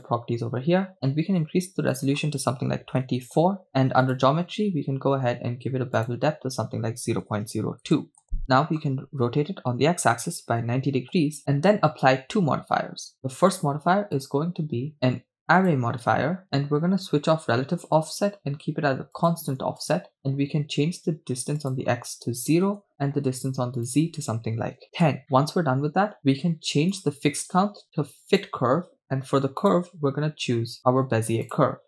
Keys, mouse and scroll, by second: 2.0-3.3 drag, 4.4 click, 4.6-5.9 scroll down 2, 6.3-9.2 drag, 9.2 r, 9.9 x, 10.5 9, 10.5 0, 11.0 Return, 13.5-16.6 drag, 18.0 click, 19.2 click, 20.0 click, 22.8 click, 23.8-25.1 drag, 25.4-26.9 middle drag, 27.0-28.6 drag, 29.6-30.7 drag.